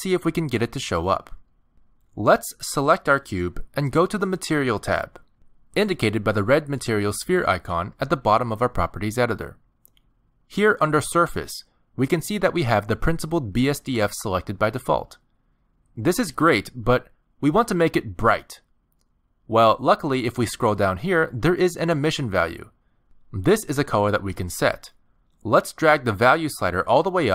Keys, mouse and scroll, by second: 3.4 click, 6.6 click, 20.6-22.3 scroll down 22, 23.8 click.